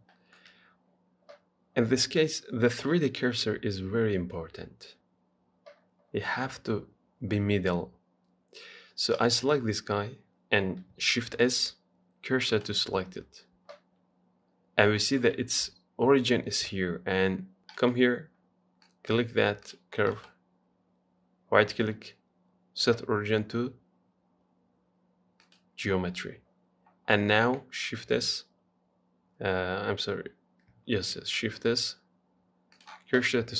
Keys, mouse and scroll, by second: 0.3-3.6 shift+middle drag, 9.4 click, 11.4 shift+s, 14.3 scroll down 2, 15.2-17.6 shift+middle drag, 18.0-19.1 right drag, 19.1 click, 19.9 click, 20.4-23.6 right drag, 27.8 shift+a, 31.2 shift+s.